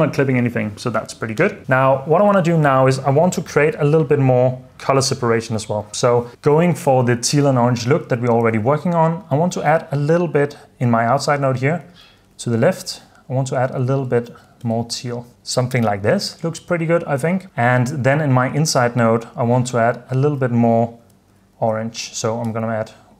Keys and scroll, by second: 12.0-14.8 typing, 12.9 Return, 15.3 super+d, 17.3 super+s, 21.1-22.5 typing.